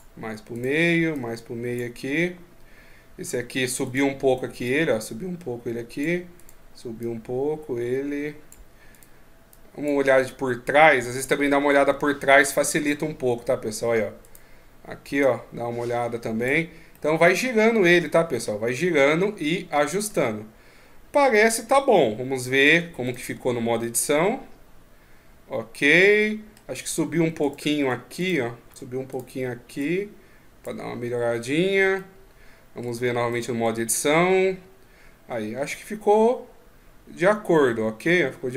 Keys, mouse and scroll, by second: 0.3 right click, 0.9 click, 3.6 right click, 4.4 click, 6.2 right click, 6.8 click, 8.7 right click, 9.3 click, 11.3 ctrl+KP_1, 14.0 right click, 15.0 click, 16.7 middle click, 19.8 middle click, 22.5 Tab, 22.8 right click, 23.1 Tab, 23.6 middle click, 27.2 right click, 27.6 Tab, 28.0 right click, 28.4 Tab, 28.9 right click, 29.6 click, 31.7 middle click, 32.7 Tab, 33.1 right click, 33.4 Tab, 33.7 middle click.